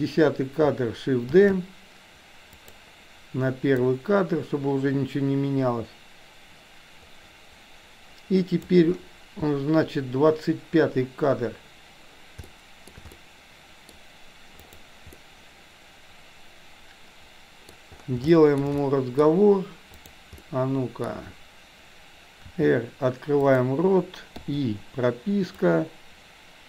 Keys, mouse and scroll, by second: 1.3 shift+d, 3.8-8.8 drag, 12.6-12.9 shift+middle drag, 13.2-13.9 middle drag, 14.6 click, 15.2-17.7 middle drag, 18.3 shift+middle drag, 18.7-19.2 middle drag, 20.1 click, 20.4 middle click, 22.6 r, 24.4 i, 25.6-26.6 drag.